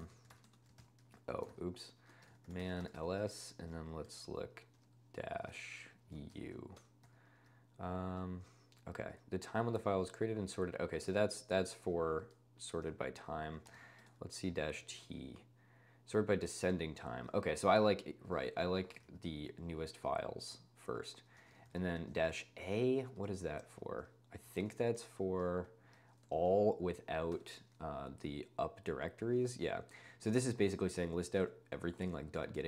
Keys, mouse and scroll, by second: 0.0-6.3 typing, 1.5 ctrl+l, 6.9 Return, 8.1 n, 12.6-15.0 typing, 17.5 ctrl+space, 18.4 Escape, 18.9 ctrl+space, 19.0 n, 21.2-23.5 typing, 22.2 ctrl+space, 24.7-28.2 typing, 27.3 Return, 32.1-32.6 drag.